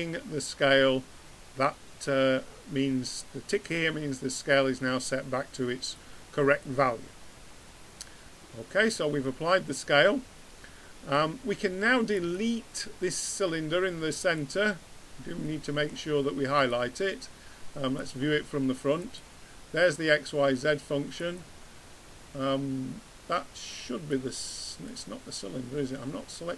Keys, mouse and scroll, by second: 5.9-8.0 drag, 8.5 middle click, 12.1-13.7 drag, 14.3-15.4 drag, 15.4 middle click, 16.5 middle click, 16.9-18.5 drag, 19.0-20.8 drag, 21.2-22.9 drag, 24.1-25.9 drag.